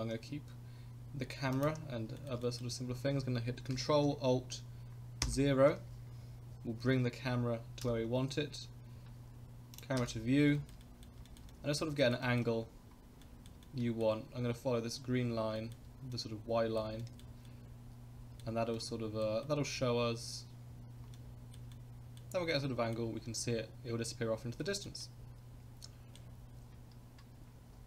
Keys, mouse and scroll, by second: 2.2 shift+middle click, 2.3 shift+scroll up 1, 2.4 middle click, 2.7 scroll down 1, 5.2 ctrl+alt+KP_0, 6.2-6.6 scroll up 3, 7.8 n, 9.7 click, 10.0 n, 10.2 scroll down 1, 10.5 shift+middle drag, 10.8 middle click, 11.3 shift+middle click, 11.5 middle drag, 12.0 shift+middle click, 12.2 middle click, 12.6 scroll up 1, 13.2 shift+middle click, 13.6 middle click, 15.5 shift+middle click, 16.1 middle click, 17.0 shift+middle click, 17.5-18.4 shift+middle drag, 18.7-19.2 shift+middle drag, 19.4 middle click, 20.7-21.0 scroll down 1, 21.1-21.5 shift+middle drag, 21.7 shift+middle click, 22.5 shift+middle click, 24.6 shift+middle click, 25.0-26.2 middle drag.